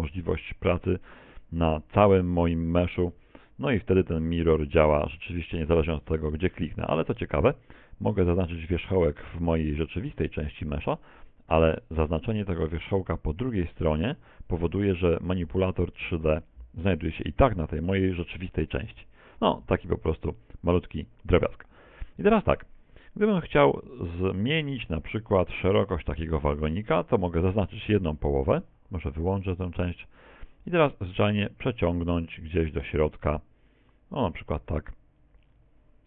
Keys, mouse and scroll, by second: 0.3 right click, 1.3 right click, 2.1 right click, 3.2 g, 4.6 right click, 4.9 g, 8.1 right click, 11.6 right click, 13.7 right click, 21.9-23.1 scroll down 3, 22.3-23.1 scroll up 1, 23.1 KP_1, 23.5 KP_3, 24.6 a, 25.0 b, 29.6 click, 31.1 click.